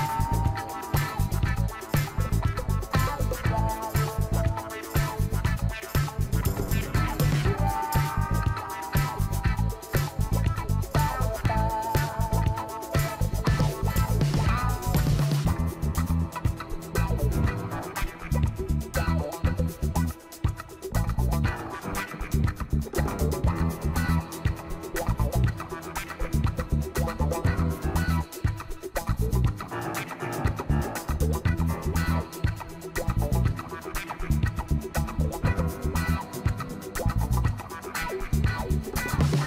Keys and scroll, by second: 0.6 ctrl+Return, 2.0 ctrl+t, 18.3 ctrl+d, 36.7 ctrl+l.